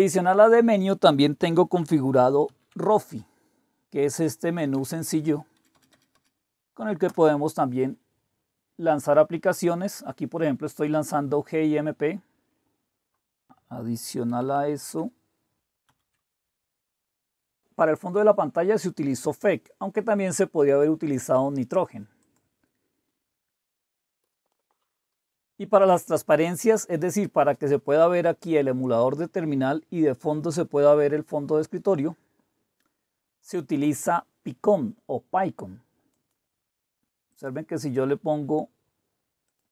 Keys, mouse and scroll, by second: 2.4 super+d, 4.6 Down, 4.7 Down, 4.9 Down, 5.1 Down, 5.3-7.2 Down, 5.6 Up, 5.7 Up, 5.9 Up, 6.1 Up, 7.1 Return, 14.4 super+1, 15.9 super+4, 22.2 click, 24.2 super+1, 36.1-37.3 right drag, 37.3 click, 39.5 click.